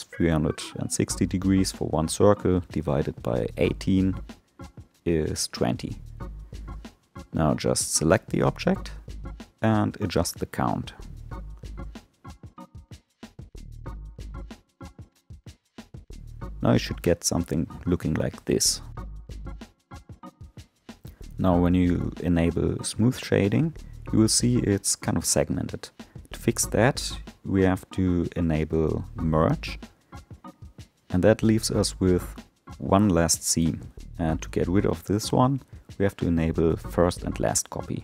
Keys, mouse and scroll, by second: 6.0 click, 7.6-11.6 drag, 13.5-16.6 drag, 17.3-20.3 drag, 20.3-22.2 right drag, 22.2-25.2 middle drag, 26.7 click, 29.3-32.4 drag, 34.5 click, 36.1-38.0 middle drag.